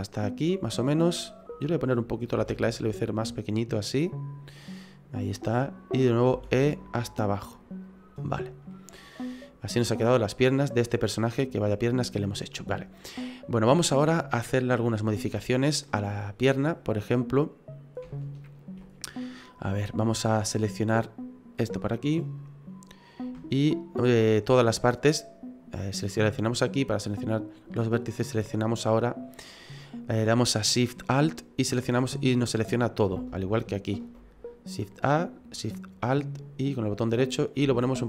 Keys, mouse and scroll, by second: 2.4 s, 6.3 e, 8.7 middle click, 9.7-10.0 scroll down 4, 10.0 middle click, 15.9 middle click, 17.3 right click, 18.1 alt+shift+right click, 19.1 right click, 19.9-20.2 scroll up 4, 20.2 middle click, 21.5 click, 23.0 right click, 23.5 alt+shift+right click, 24.3 middle click, 27.7 middle click, 29.0 middle click, 31.9 middle click, 33.5 alt+shift+right click, 37.6 s.